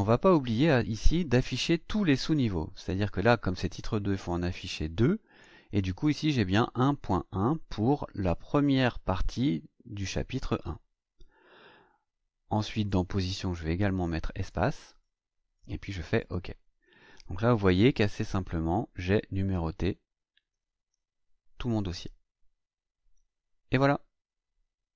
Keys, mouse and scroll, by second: 4.4 click, 12.8 click, 13.8 click, 14.4 click, 16.1 click, 17.4-17.8 scroll up 2, 17.9-18.3 scroll up 2, 18.5 scroll up 2, 19.0 scroll up 1, 19.7-20.9 scroll down 4.